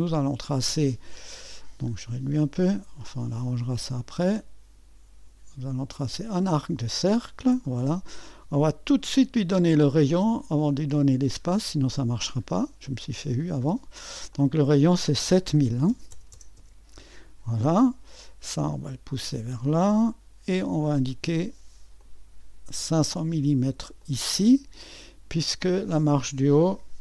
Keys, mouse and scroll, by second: 1.6-3.4 scroll down 1, 3.4-7.7 drag, 8.9-12.0 drag, 14.3-15.5 drag, 15.5 KP_7, 15.9 KP_0, 16.1 KP_0, 16.3 KP_0, 16.6 Return, 18.7-27.0 drag, 18.7 typing, 20.2 typing.